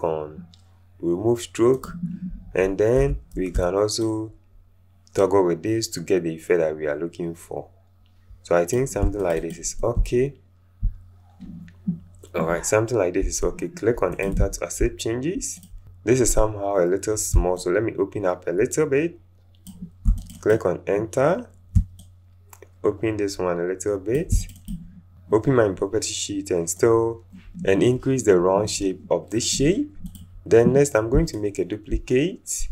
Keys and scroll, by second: 3.0 v, 3.5 shift+v, 13.2 Return.